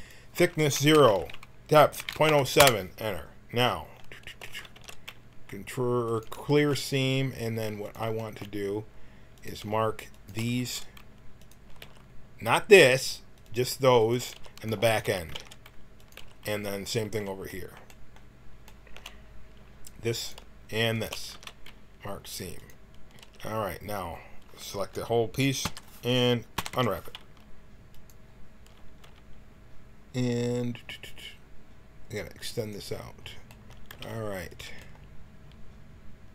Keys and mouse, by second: 0.0-1.8 drag, 3.5-4.7 middle drag, 4.7 ctrl+e, 6.4 middle click, 7.8-10.5 drag, 11.4 ctrl+e, 11.4-14.1 drag, 11.7 a, 14.3 a, 15.2 ctrl+e, 16.1 a, 20.1-21.2 right drag, 21.2 ctrl+e, 23.1 a, 25.5 l, 26.5 u, 26.7 u, 28.3 click, 29.0 t, 32.3 middle click, 32.4 click, 32.5 middle click, 32.6-33.8 drag, 33.8 g.